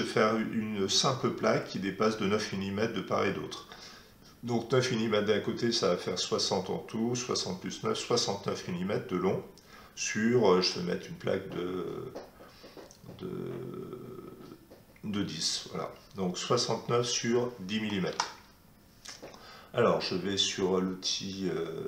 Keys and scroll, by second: 18.1 alt+Tab.